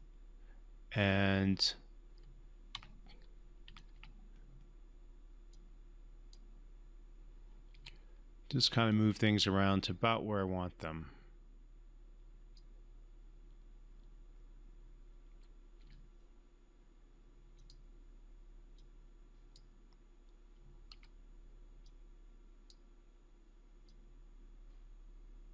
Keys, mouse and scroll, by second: 2.8 Tab, 3.9 q, 5.5-6.4 drag, 7.7 w, 8.9-12.6 drag, 15.3 w, 15.8 e, 17.5-19.7 drag, 20.9 w, 21.8-22.8 drag.